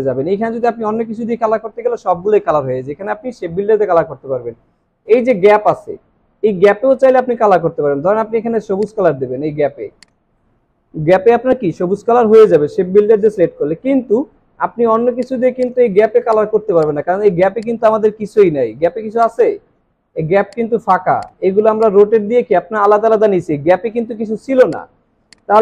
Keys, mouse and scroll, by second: 14.1 ctrl+z.